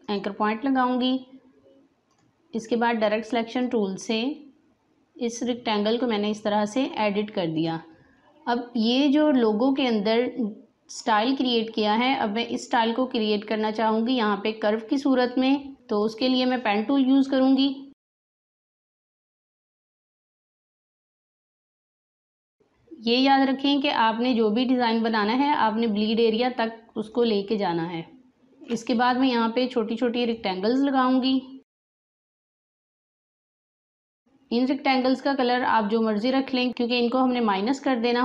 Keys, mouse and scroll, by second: 0.0 click, 15.2 space, 16.6-19.0 drag, 19.4 click, 20.9-28.3 drag, 28.3 space, 30.2-37.8 drag.